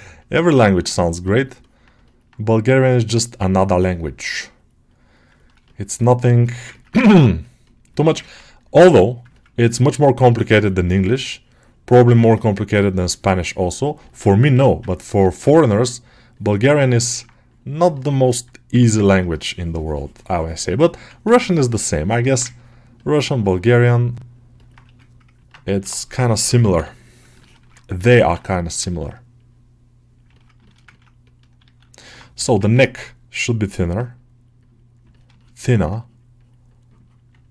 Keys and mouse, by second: 0.7 middle click, 1.5 alt+middle click, 1.9 middle click, 3.8 alt+middle click, 5.2 middle click, 5.5 shift+middle click, 5.9 middle click, 6.3 alt+shift+middle click, 6.6 ctrl+alt+middle click, 7.3 click, 7.8 shift+middle click, 8.1 ctrl+middle click, 9.2 ctrl+alt+middle click, 9.6 middle click, 10.1 click, 10.8 middle click, 11.2-12.2 drag, 12.2-14.1 middle drag, 14.4 g, 14.8 ctrl+middle click, 16.9 ctrl+middle click, 17.3 click, 17.8 alt+middle click, 18.1 alt+middle click, 18.9 middle click, 20.8 1, 21.1 ctrl+click, 22.1 alt+middle click, 22.4 ctrl+click, 22.8 click, 23.6 alt+middle click, 24.4 middle click, 26.3 [, 26.5 [, 27.3 ctrl+middle click, 27.8 g, 28.2 ctrl+middle click, 28.4 alt+middle click, 28.8 ctrl+middle click, 29.2 middle click, 30.2 middle click, 30.5 shift+middle click, 30.8 ctrl+alt+middle click, 31.1 alt+middle click, 31.5 alt+q, 31.9 alt+middle click, 32.2 g, 32.6 ctrl+alt+middle click, 33.6 middle click, 35.0 alt+middle click, 35.2 shift+middle click, 35.6 alt+middle click, 36.3-37.3 drag, 37.3 alt+middle click.